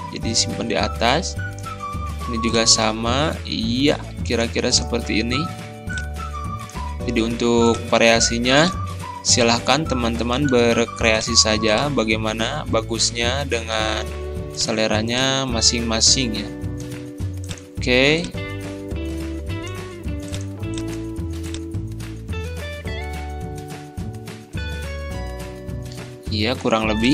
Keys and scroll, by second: 7.3 ctrl+z, 10.5 ctrl+z.